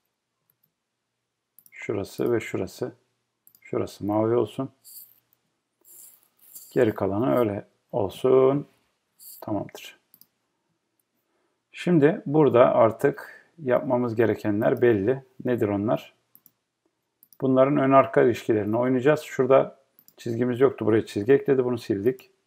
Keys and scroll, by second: 21.2 BackSpace.